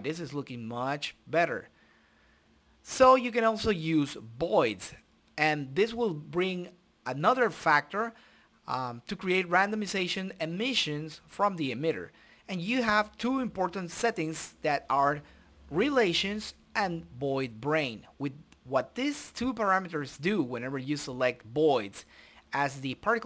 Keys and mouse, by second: 0.1-2.8 drag, 3.3 click, 4.5-6.0 drag, 6.2-7.5 drag, 8.0 click, 9.0 click, 11.0-12.0 middle drag, 12.0-13.5 drag.